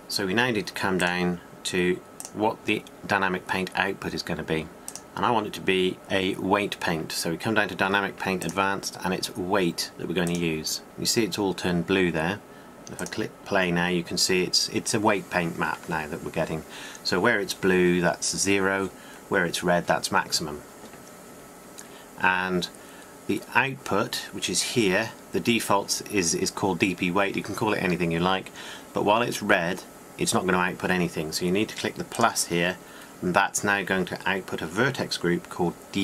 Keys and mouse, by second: 4.0-5.3 drag, 6.5-12.6 drag, 32.3-36.0 drag.